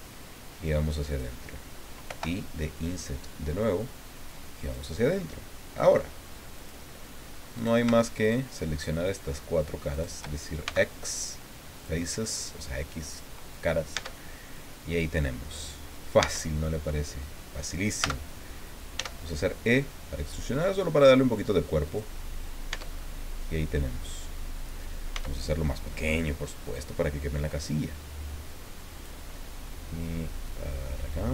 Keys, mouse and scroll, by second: 1.1 click, 2.0 i, 4.6 click, 6.5 click, 7.5 right click, 8.2 shift+right click, 9.0 shift+right click, 9.9 shift+right click, 10.6 shift+x, 11.8 click, 13.9 Tab, 14.4-16.1 middle drag, 16.2 Tab, 18.0 a, 18.9 e, 21.8 click, 22.7 Tab, 23.0-24.1 middle drag, 25.1 s, 26.6 click, 27.6-29.2 drag, 30.4-31.3 drag.